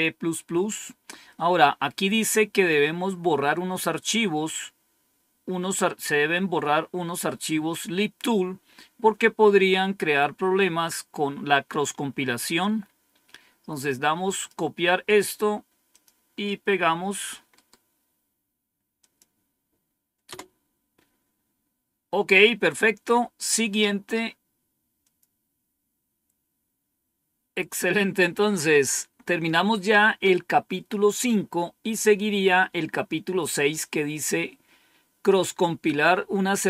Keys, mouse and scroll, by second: 12.5-15.0 drag, 15.0 right click, 16.0 click, 17.4 right click, 18.9 click, 20.2 Return, 24.9 click.